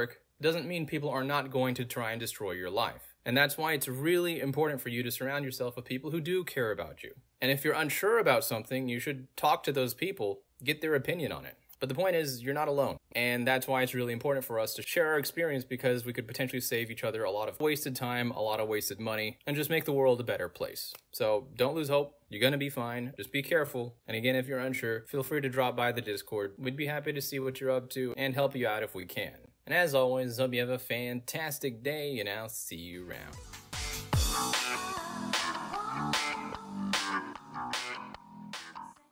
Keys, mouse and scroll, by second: 0.3 click, 1.7 click, 2.0 click, 25.0-25.9 scroll down 2, 26.4 click, 27.7-30.8 middle drag, 27.8-29.6 scroll down 2, 29.6-30.8 scroll down 1, 31.0 middle click, 31.0 scroll down 2, 32.7-39.1 middle drag, 32.7-39.1 scroll down 2.